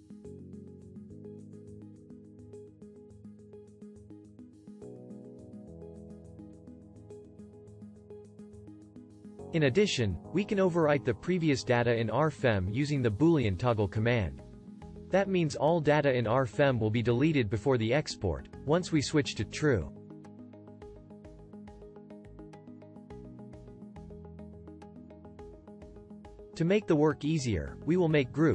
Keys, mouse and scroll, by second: 24.8-28.5 right drag.